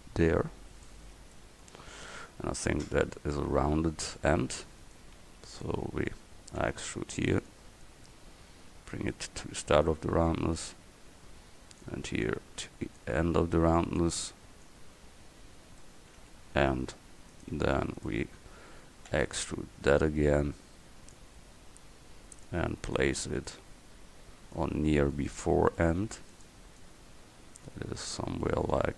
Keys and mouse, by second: 6.7 e, 9.2 click, 10.6-12.3 right drag, 11.9 click, 13.0-17.4 drag, 19.2 e, 23.0-24.6 middle drag, 24.6-26.4 drag, 28.1-28.9 drag.